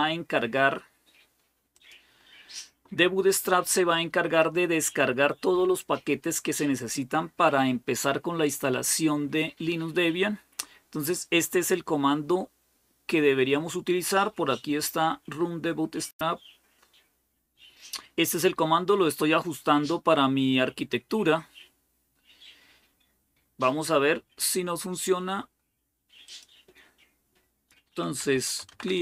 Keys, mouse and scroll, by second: 1.5-4.6 drag, 14.0-15.2 scroll down 1, 15.2-18.4 scroll down 1, 26.1-27.1 drag, 27.8-29.0 typing.